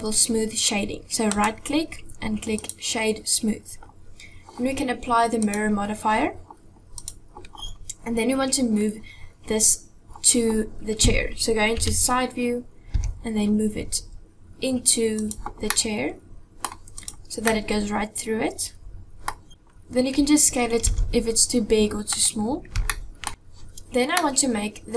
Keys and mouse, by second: 1.5 click, 5.4 click, 7.0 click, 11.8 KP_3, 13.0 g, 15.7-16.7 middle drag, 17.0 click, 17.5-19.3 middle drag, 20.9 s, 22.9 shift+middle click, 24.2 middle click.